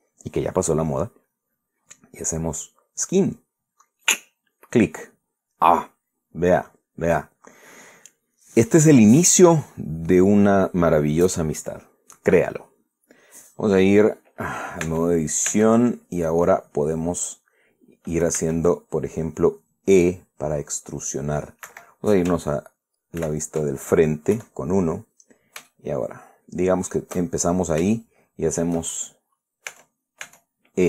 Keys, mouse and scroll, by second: 4.8 click, 15.5 Tab, 19.1 e, 22.4 Escape, 23.9 ctrl+z, 25.0 KP_1, 26.4-27.8 shift+middle drag, 28.1-28.4 shift+scroll down 3, 28.6 shift+middle click, 30.4 Tab.